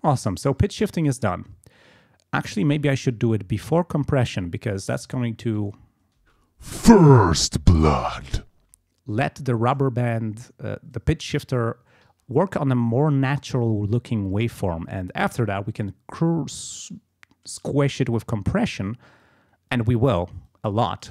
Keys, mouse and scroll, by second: 1.2 click, 2.8 click, 6.2 space, 8.6 space, 12.2-13.2 ctrl+scroll up 6, 14.3 ctrl+scroll down 2, 14.9 ctrl+scroll up 2, 15.7 ctrl+scroll down 2, 16.6 ctrl+scroll down 2, 18.1 click, 19.2 click, 20.5 click.